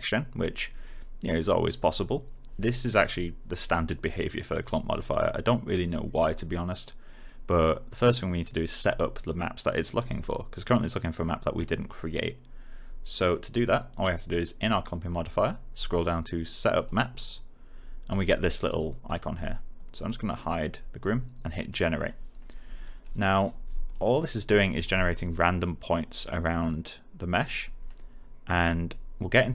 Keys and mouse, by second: 16.7 click, 23.8 click.